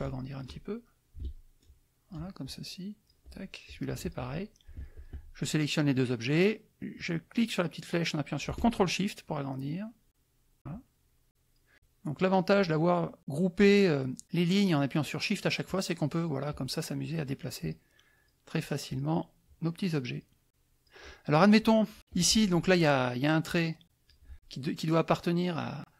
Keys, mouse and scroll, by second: 1.6 ctrl+shift+click, 2.4 ctrl+shift+click, 3.7 click, 4.0 shift+click, 4.9 shift+click, 6.9-10.6 drag, 10.7-11.7 ctrl+shift+drag, 13.2-14.2 drag, 15.6 click, 17.6 click, 18.1 click, 18.9 click, 19.4 click, 20.5 click, 22.1 click, 23.5 click.